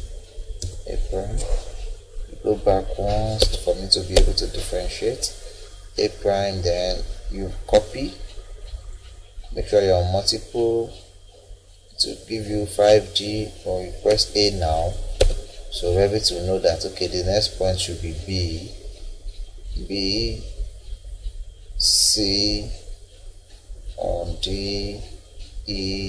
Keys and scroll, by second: 0.6 BackSpace, 3.4 Escape, 12.5 Escape, 14.1 a, 15.2 Escape.